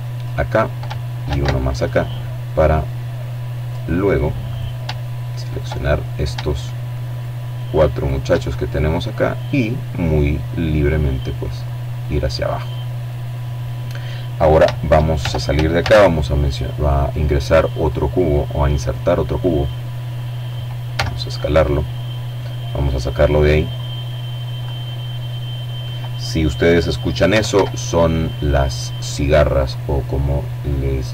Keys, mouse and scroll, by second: 1.9 click, 2.8 right click, 3.7 shift+right click, 4.0 shift+click, 5.3 shift+right click, 6.2 right click, 7.3-10.3 drag, 13.4 shift+Tab, 14.0 a, 16.0 click, 17.2-17.8 scroll down 1, 18.0 click, 18.4-19.2 scroll down 2, 19.2 s, 20.2 click, 20.6 middle click, 22.0-23.3 drag, 23.1 right click, 23.6-24.6 middle drag, 25.5 s, 25.7 x, 27.1 click, 27.9-30.6 drag, 30.5 middle click.